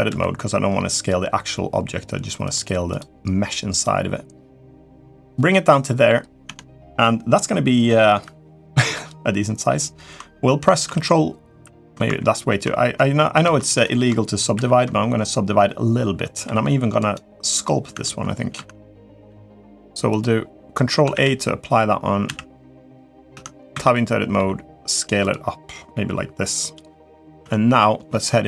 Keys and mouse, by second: 2.7 click, 3.6-5.1 drag, 5.3 middle click, 6.2 Tab, 6.8-7.6 middle drag, 10.6 ctrl+4, 13.2 ctrl+z, 14.3 ctrl+3, 16.2 s, 17.7 Tab, 18.3 Tab, 19.9 click, 20.5 click, 20.9 ctrl+a, 22.0 a, 22.6 click, 23.1 Tab, 23.5 a, 24.1 s, 27.2 Tab.